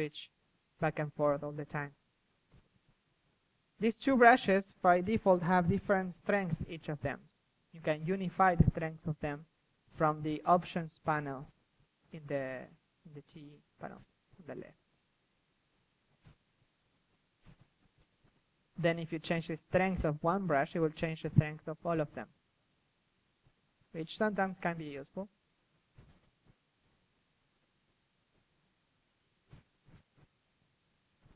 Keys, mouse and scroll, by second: 0.4 ctrl+z, 1.4 ctrl+z, 1.5 click, 2.3-2.7 drag, 4.9-5.6 middle drag, 5.6-6.1 drag, 6.1 middle click, 6.3 a, 7.2 middle click, 8.3-11.4 drag, 10.3 middle click, 11.9 click, 12.3-12.8 middle drag, 12.8-14.3 drag, 12.8 KP_3, 14.7-15.7 middle drag, 15.7 KP_3, 17.1 click, 17.6-18.3 middle drag, 18.3 KP_1, 18.5 drag, 19.2 KP_3, 19.5 middle drag, 19.7-20.7 drag, 20.6 KP_1, 20.7-21.1 drag, 21.2 KP_3, 21.5-22.1 drag, 23.4-24.1 middle drag, 24.1-24.8 drag, 24.1 KP_1, 25.7-26.7 drag, 26.7 middle click, 27.1 KP_3, 27.6-28.5 drag, 29.1-30.7 middle drag, 30.7 click, 30.7 KP_3, 31.1-31.3 drag.